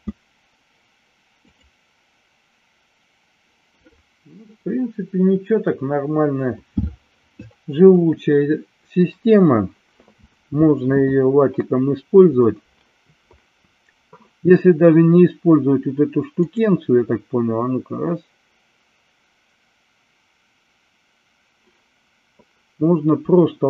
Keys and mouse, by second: 1.4 click, 16.4 click.